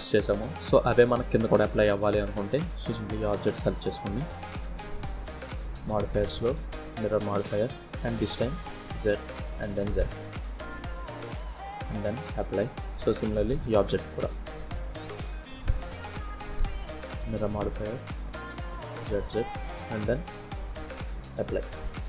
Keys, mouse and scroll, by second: 0.2 scroll down 1, 0.7 middle click, 1.2-1.6 scroll up 3, 1.6 shift+middle click, 2.1 click, 2.6 click, 4.5 click, 7.3 click, 7.9 click, 8.6 click, 9.4 middle click, 10.9 click, 12.4 click, 14.5 click, 17.2 click, 17.5 click, 18.0 click, 19.7 click, 21.0-21.3 scroll down 2, 21.3 middle click.